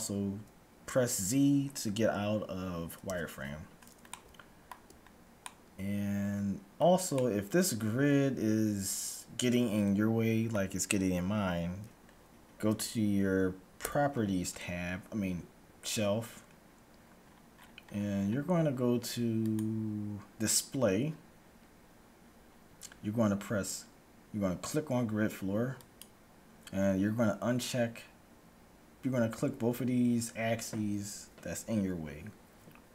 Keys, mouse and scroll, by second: 1.6 scroll down 1, 3.1 z, 4.1-9.1 middle drag, 13.9 n, 17.2-19.6 middle drag, 19.6-21.2 drag, 20.1 middle click, 25.9-27.6 drag.